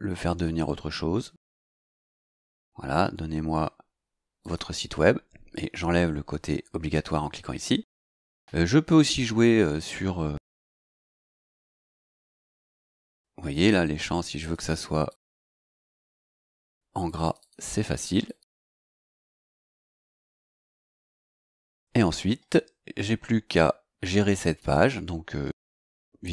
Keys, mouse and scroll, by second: 2.0 click, 4.4 click, 8.9 click, 10.9 click, 12.3 click, 14.4 click, 15.1 click, 15.9 click, 17.0 click, 18.2 click, 19.2 click, 20.4 click, 24.4 click.